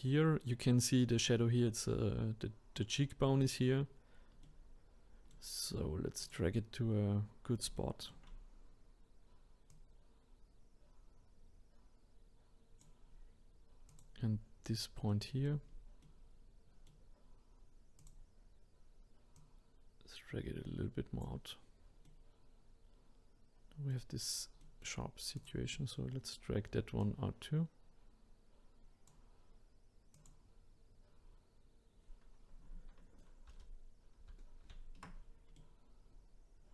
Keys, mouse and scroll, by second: 4.4-6.2 middle drag, 6.2 click, 6.8-7.8 scroll up 2, 7.8-9.7 shift+middle drag, 9.7 click, 13.9 click, 15.1 middle click, 15.7 scroll down 4, 16.0-18.0 middle drag, 18.0 click, 19.3 click, 22.0-25.3 middle drag, 25.3 click, 25.7-27.0 middle drag, 27.0 click, 30.1 click, 30.7 scroll up 1, 33.5 ctrl+z, 34.2 ctrl+z, 35.6-36.7 middle drag.